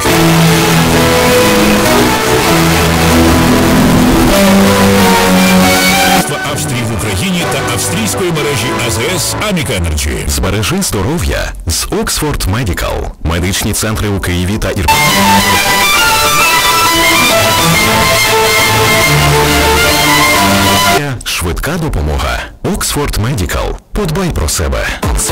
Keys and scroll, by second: 6.2 Page_Down, 21.0 Page_Down.